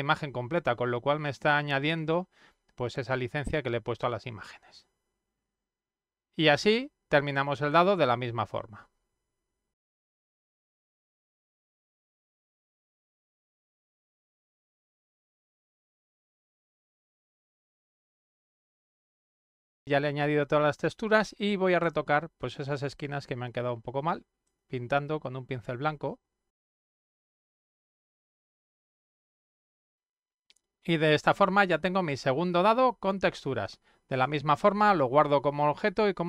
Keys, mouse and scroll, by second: 3.9-7.7 drag, 10.4 click, 10.7 click, 10.8 click, 11.7 click, 12.9 click, 13.1 click, 13.6 click, 14.0 click, 14.5 click, 15.3 click, 15.7 click, 15.7 ctrl+z, 15.8 click, 16.1 click, 16.3 click, 16.6 click, 17.0 click, 17.5 click, 18.4 click, 18.7 ctrl+z, 18.8 click, 18.9 click, 19.1 click, 19.6 click, 21.8 click, 24.4 click, 26.5 click, 26.7 click, 27.3 click, 27.5 ctrl+scroll up 1, 27.6 click, 27.7 click, 28.0 click, 28.2 ctrl+scroll down 1, 28.4 click, 29.3 click, 29.5 click, 29.8 click, 29.9-33.6 drag.